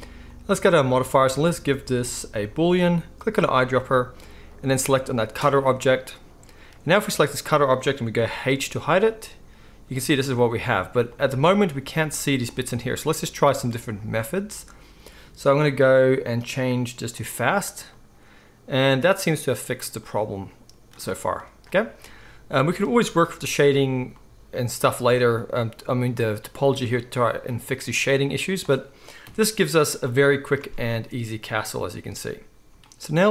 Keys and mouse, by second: 0.2-3.4 middle drag, 3.4-7.0 right drag, 7.0 middle click, 7.1-11.1 right drag, 8.1 h, 11.1-26.7 middle drag, 17.1 click, 17.1 right click, 26.7-33.3 right drag, 29.2 KP_1, 30.6 alt+a.